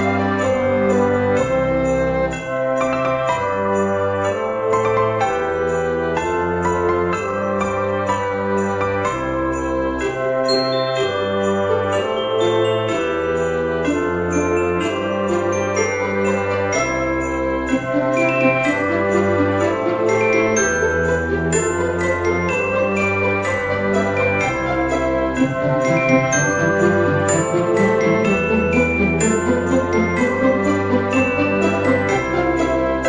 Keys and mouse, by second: 0.2 g, 0.5 y, 1.3 click, 1.4 g, 1.5 z, 2.0 click, 2.2 middle click, 3.0 s, 4.0 click, 4.5 KP_1, 5.2 middle click, 6.5 shift+middle click, 7.6 s, 7.9 z, 8.9 click, 9.3 Tab, 10.1 shift+middle click, 13.1 s, 13.4 x, 14.1 y, 15.5 click, 16.7 click, 18.4 middle click, 19.2 shift+click, 20.6 KP_1, 21.8 ctrl+b, 26.1 click, 26.9 a, 27.2 s, 27.6 x, 29.1 click, 29.3 s, 29.5 z, 30.7 click, 31.0 g, 31.2 x.